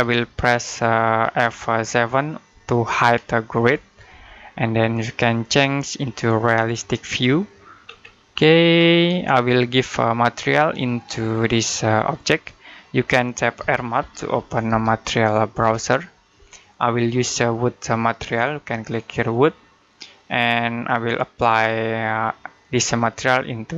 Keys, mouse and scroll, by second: 0.0 middle click, 1.6-3.4 scroll down 1, 3.4 F7, 5.3 click, 7.7-9.0 scroll up 1, 9.3 shift+middle click, 12.2 middle click, 13.2-15.4 typing.